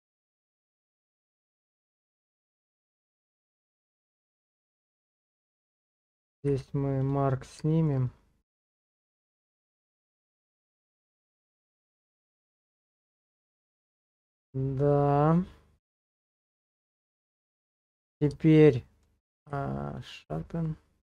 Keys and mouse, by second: 3.3 click, 4.1 Tab, 5.8 shift+click, 6.5 q, 7.7 shift+middle click, 8.1 middle click, 10.9 Tab, 12.0 KP_0, 17.1 middle click, 18.0 middle click, 18.4 shift+middle click, 18.9 middle click, 19.4 q, 20.7 middle click.